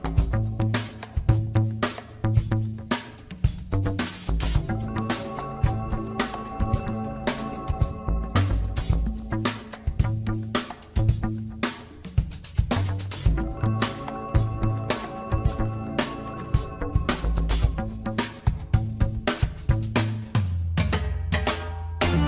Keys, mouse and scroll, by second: 0.1 scroll up 2, 1.1 g, 2.5 click, 3.1 g, 4.2 scroll down 2, 4.5 shift+middle click, 4.8-5.1 scroll up 3, 5.1 click, 5.7 g, 6.7 scroll down 4, 6.9 shift+middle click, 7.2 scroll up 5, 8.7 click, 9.7 g, 10.8 scroll down 1, 11.1 shift+middle click, 11.4 scroll up 3, 11.8 shift+middle click, 12.5 click, 13.3 g, 14.6 scroll down 4, 14.8 shift+middle click, 15.1 scroll up 1, 15.3 click, 16.0 g, 17.4 scroll down 2, 17.6 shift+middle click, 18.0 click, 18.2-18.9 scroll up 1, 18.9 g, 20.7-21.5 scroll down 6, 21.6 shift+middle click.